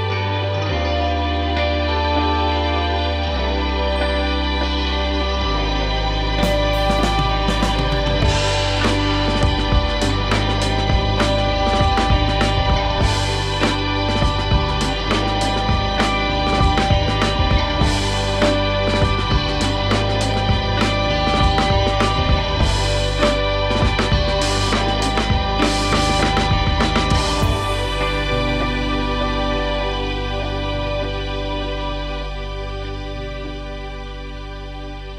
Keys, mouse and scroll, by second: 0.4-2.0 shift+middle drag, 2.6 Tab, 3.4 k, 3.6-5.2 scroll up 2, 7.9-8.4 scroll up 1, 8.4 1, 9.4 k, 11.9 click, 12.6 middle click, 13.4 g, 14.5 KP_3, 15.2 click, 15.6 g, 16.6 click, 16.8 g, 18.3 click, 18.6 g, 19.7 KP_1, 20.2 click, 20.5 g, 21.2 click, 21.3 g, 21.9 click, 22.3 g, 23.2-24.1 scroll down 1, 24.1 Tab, 24.4-25.1 scroll down 1, 25.1-26.0 scroll up 2, 26.0 Tab, 26.8-28.1 scroll up 1, 28.1 k, 34.5 middle click.